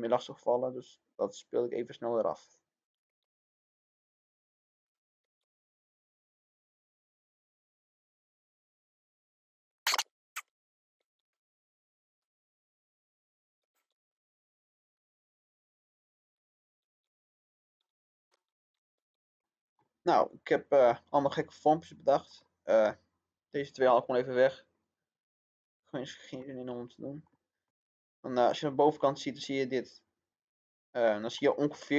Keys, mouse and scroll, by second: 1.1 click, 2.1-2.6 scroll down 1, 2.8 click, 3.0 middle click, 3.4 click, 5.2 middle click, 5.6-9.0 drag, 9.6 middle click, 10.0 click, 10.4 middle click, 10.7 click, 10.9 middle click, 11.2-13.3 drag, 13.3 middle click, 13.9 scroll up 1, 14.0 click, 15.2 click, 16.1 middle click, 16.4 click, 16.7 middle click, 17.2 click, 17.7 middle click, 18.0 click, 18.2 middle click, 18.7 click, 18.9-23.0 middle drag, 23.3 click, 25.3-25.7 scroll down 1, 26.4-28.6 middle drag, 28.6 scroll up 1, 30.2 scroll down 1, 31.0-31.9 middle drag.